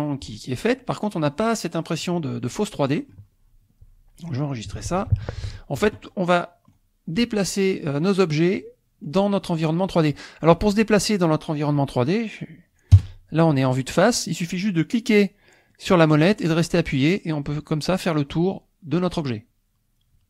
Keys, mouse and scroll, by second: 5.1 ctrl+s, 5.5-6.9 shift+drag, 8.5 click, 10.4 middle click, 12.9 KP_0, 14.0-15.7 middle drag, 15.7-20.2 drag.